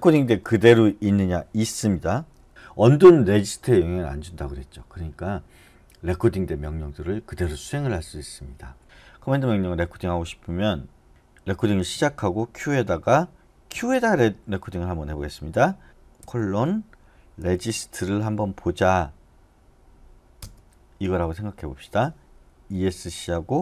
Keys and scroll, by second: 0.1 Down, 0.3 Down, 2.3-3.0 typing, 11.1 BackSpace, 11.9 q, 17.4-18.4 typing, 20.4 Return, 22.7 Escape.